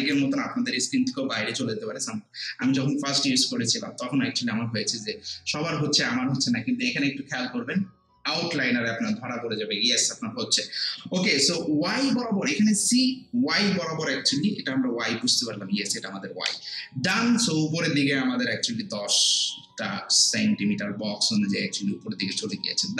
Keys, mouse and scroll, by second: 11.4-14.7 alt+drag.